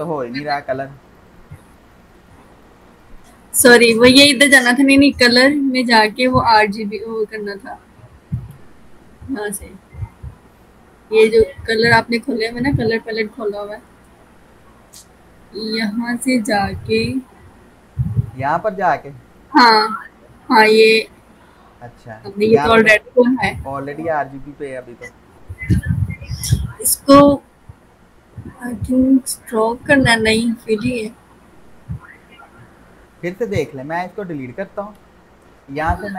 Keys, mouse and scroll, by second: 5.3 v, 6.1 click, 19.2 click, 33.9 click.